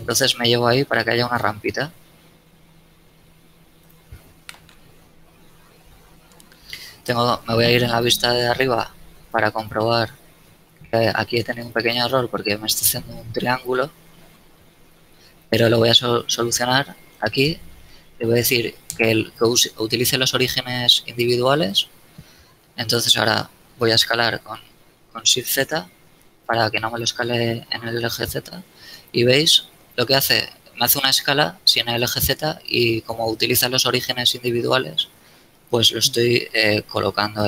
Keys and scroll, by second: 6.9 KP_7, 8.6 z, 23.9 shift+s, 24.2 shift+z.